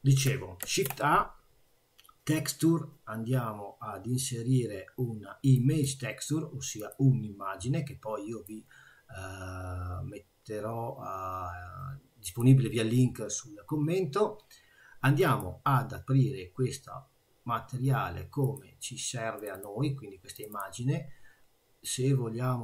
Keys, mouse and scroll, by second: 0.6 shift+a, 8.4 click, 15.2 click.